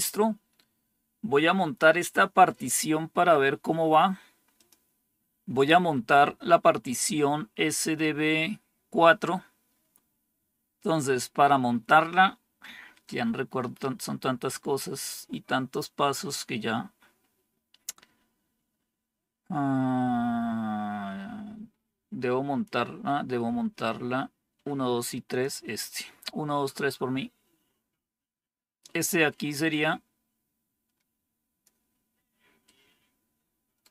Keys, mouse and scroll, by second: 4.5 click, 25.2 click, 28.0-28.4 scroll down 1, 29.6-31.6 drag, 32.6-33.7 right drag.